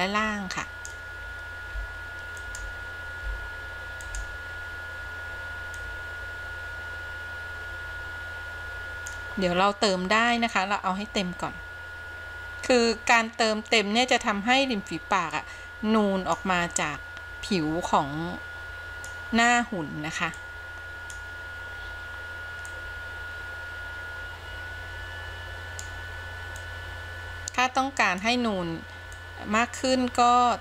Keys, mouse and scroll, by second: 1.9 f, 2.6 f, 3.5 f, 4.3 f, 6.0-9.3 drag, 10.8-14.4 drag, 15.6-16.6 drag, 17.1-19.3 drag, 20.6-21.3 drag, 22.9-26.1 drag, 26.8-28.5 drag, 29.3-30.6 drag.